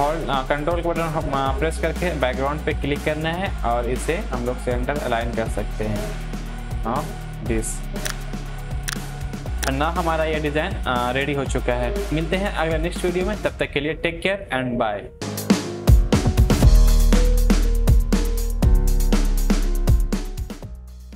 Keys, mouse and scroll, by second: 2.2 ctrl+click, 6.7 Up, 7.0 Down, 7.5 click, 11.3 alt+Num_Lock, 11.4 click, 11.6-11.9 alt+scroll down 1, 11.9 alt+scroll up 1.